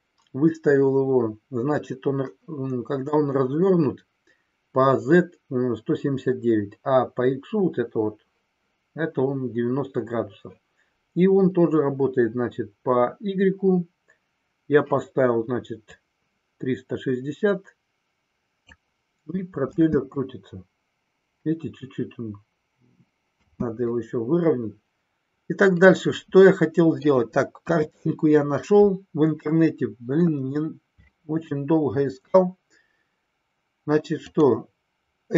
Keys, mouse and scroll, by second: 24.1-26.9 middle drag, 27.6 KP_1, 34.3-35.3 drag.